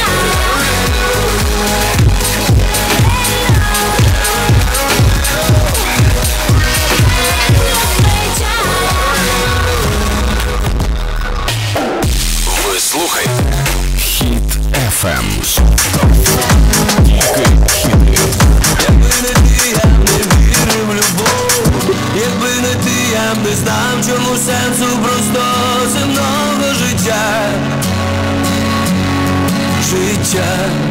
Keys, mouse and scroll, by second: 8.1 Page_Down, 21.9 Page_Down.